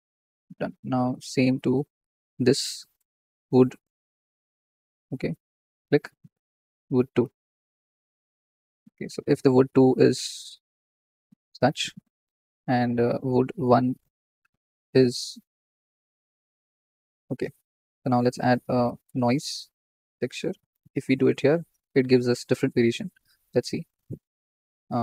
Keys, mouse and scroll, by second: 0.5 Tab, 1.9-4.7 drag, 4.7-5.6 shift+middle drag, 5.6-20.0 drag, 7.7-9.2 scroll down 4, 20.0 shift+a, 21.6 scroll up 2, 22.8 ctrl+z, 24.2 ctrl+x.